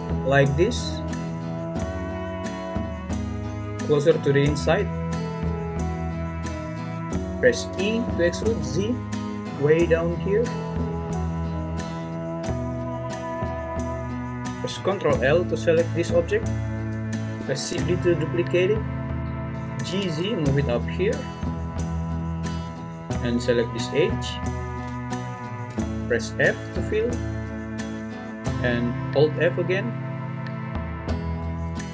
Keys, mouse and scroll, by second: 7.7 e, 8.6 z, 14.9 l, 17.6 shift+d, 19.2 Escape, 19.5 g, 19.9 z, 22.7 `, 26.7 f, 27.9 click, 29.3-31.6 f.